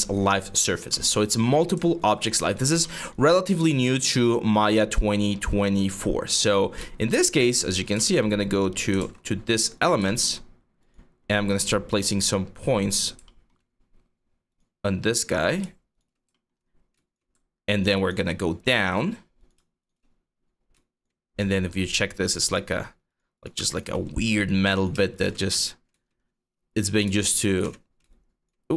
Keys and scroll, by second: 7.2 4, 8.6 ctrl+z, 16.3 5, 20.9-22.1 typing, 25.2-28.7 typing.